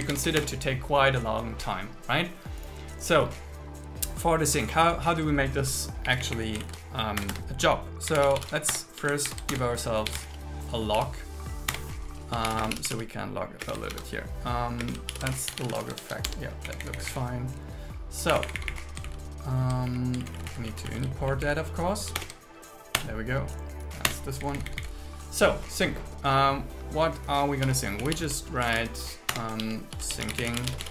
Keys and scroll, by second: 0.0 space, 0.2 alt+8, 0.4 Return, 6.1 Up, 6.8 super+Right, 7.2 Return, 8.8 Return, 9.0 space, 9.3 alt+8, 9.6 Return, 10.2 Return, 11.8 Return, 12.6 space, 14.0 shift+0, 14.9 space, 15.2 shift+l, 16.0 shift+f, 16.3 Tab, 16.7 Down, 18.4 Up, 19.1 alt+Right, 19.9 Up, 20.2 alt+Right, 21.3 Left, 22.2 alt+BackSpace, 23.0 Return, 24.4 Down, 29.4 Return, 29.6 shift+2, 30.0 shift+s.